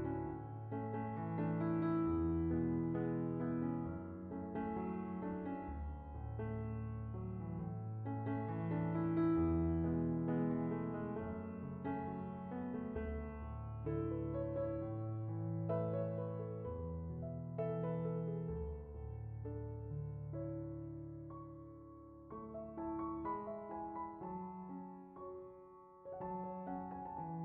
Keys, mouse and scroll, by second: 1.2-2.0 drag, 3.2 click, 6.4-11.7 middle drag, 13.0 click, 18.1-27.4 drag.